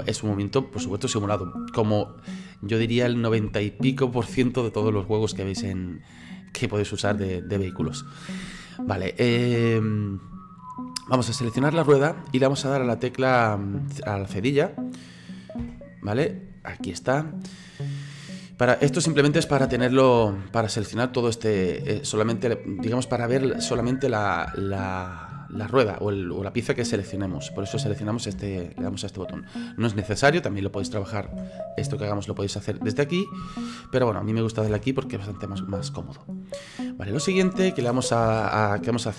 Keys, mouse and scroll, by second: 11.5 right click, 15.6 /, 16.6-19.8 middle drag, 19.8 /, 20.2 /, 21.0-23.8 middle drag, 23.8 /, 24.5 /, 26.2 /, 28.4 /, 31.3 /, 31.7-32.1 scroll up 4, 32.1-34.7 middle drag, 34.7 /, 35.1 scroll down 2, 35.5-38.2 middle drag, 38.2 KP_3.